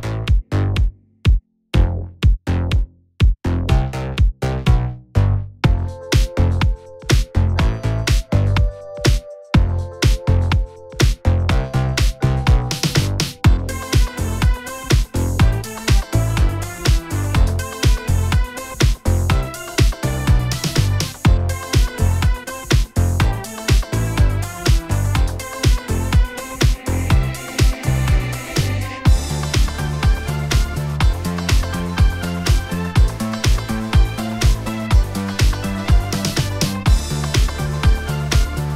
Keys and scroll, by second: 3.2 F11, 5.4 a, 7.7 a, 14.6 x, 24.0 F11, 26.7 F11, 30.8 F11, 34.4 F9, 35.8 Tab.